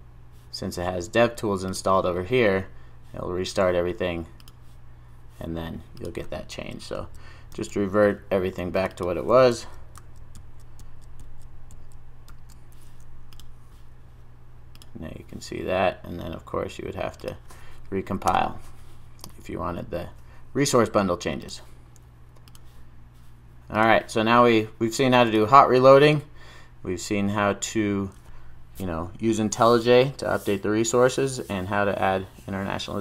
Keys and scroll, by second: 6.6 super+z, 7.5 super+s, 9.5 super+z, 10.8 super+z, 11.7 super+z, 12.3 super+s.